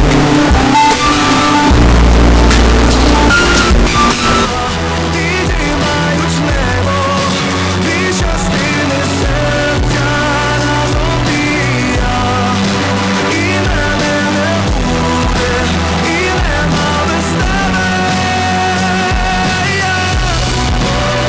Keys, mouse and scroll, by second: 5.0 Page_Down, 14.2-15.6 drag.